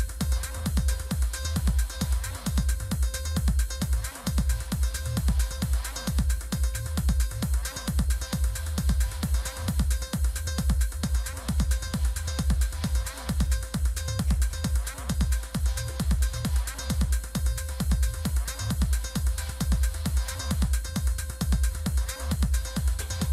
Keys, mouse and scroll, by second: 1.3 click, 3.1-5.4 drag, 5.9-7.7 typing, 9.2 click, 12.0 click, 13.3 click, 16.5 click, 19.9 click, 21.3 click, 22.4 click.